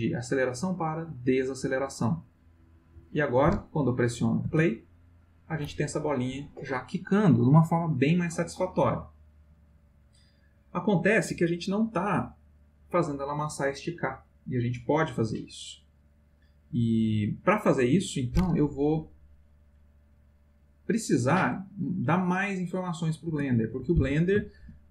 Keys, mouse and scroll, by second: 0.1 click, 1.2 click, 2.2 click, 4.4 space, 23.3 space, 24.6 ctrl+z.